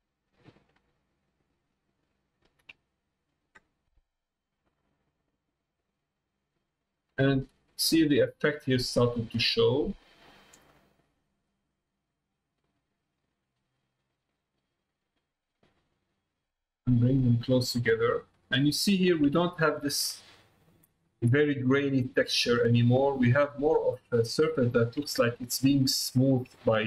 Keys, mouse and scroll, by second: 0.9-2.3 shift+middle drag, 5.5-10.8 drag, 11.5-12.7 drag, 13.1-15.7 drag, 16.3-18.1 drag, 18.8 middle click, 19.5 shift+middle click, 20.1-21.1 ctrl+middle drag, 22.1 middle click, 23.0 middle click, 25.2 middle click.